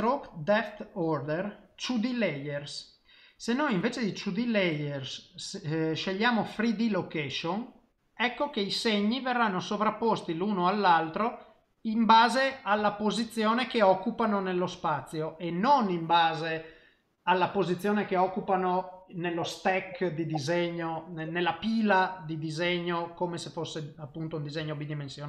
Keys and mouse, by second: 4.4 click, 8.5 middle click, 12.9 ctrl+middle click, 13.3 middle click, 24.0 middle click, 24.6 shift+middle click.